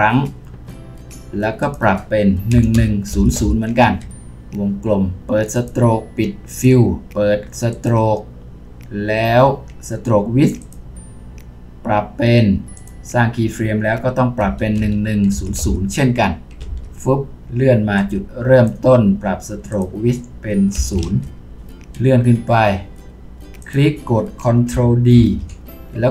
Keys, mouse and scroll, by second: 2.5-3.4 typing, 3.8 Return, 14.4-15.6 typing, 16.6 Return, 20.8 typing, 21.0 Return, 21.9-24.3 scroll up 1, 25.2 ctrl+d.